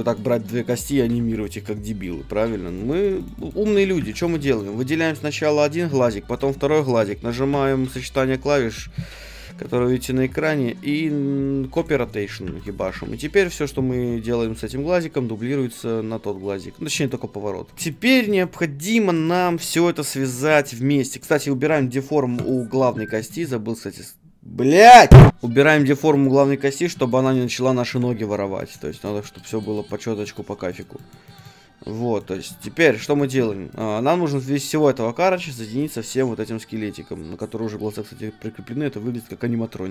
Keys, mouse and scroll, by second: 0.1-2.0 right drag, 1.0 r, 2.7-11.8 right drag, 2.9-6.4 middle drag, 4.0 a, 7.5 ctrl+shift+c, 12.6-14.6 right drag, 12.8 r, 16.9-18.2 right drag, 17.0-21.1 middle drag, 17.7 r, 21.1-22.5 right drag, 22.4-25.1 drag, 23.0 right click, 25.8-32.5 middle drag, 32.5 ctrl+Tab, 33.4 a, 33.7-37.8 right drag, 33.9 g, 35.9 g.